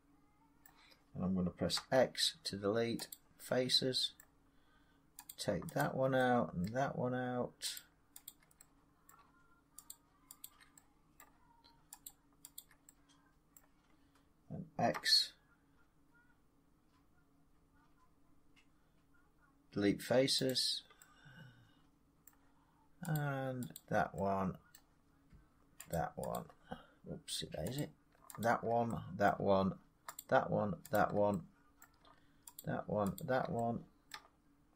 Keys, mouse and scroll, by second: 0.6 middle click, 1.7 x, 3.0 click, 4.1 middle click, 5.2 click, 6.6 middle click, 7.7 shift+click, 8.2 shift+click, 9.0 middle click, 9.8 shift+click, 10.4 shift+click, 11.1 middle click, 12.0 shift+click, 12.5 shift+click, 13.5 middle click, 14.9 x, 17.9 middle click, 20.5 click, 21.1 click, 22.1 middle click, 23.1 click, 23.7 shift+click, 24.7 middle click, 25.8 shift+click, 26.5 click, 27.7 click, 28.3 shift+click, 29.2 middle click, 30.1 shift+click, 30.9 shift+click, 31.7 middle click, 32.5 shift+click, 33.1 shift+click, 34.0 middle click.